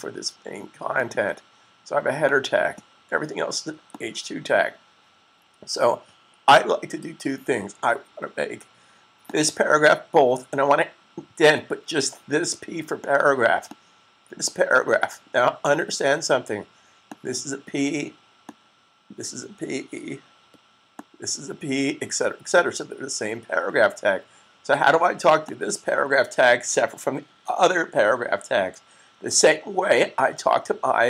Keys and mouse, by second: 9.1 click, 13.8 click, 17.0 click, 21.0 click, 25.2 click.